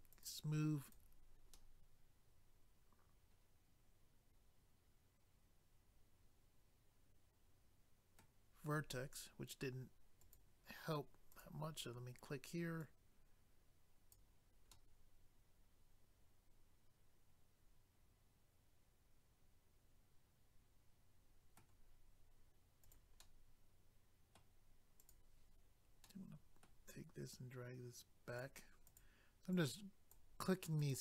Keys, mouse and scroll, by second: 0.1 click, 0.2 click, 1.5 middle click, 10.2 click, 10.3 click, 11.3 click, 11.4 click, 12.8 click, 14.7 middle click, 22.8 click, 23.0 click, 23.2 middle click, 25.0 click, 25.1 click, 26.1 middle click, 27.3 click, 28.8 click, 29.0 click, 29.5 click, 30.8 click, 30.9 click.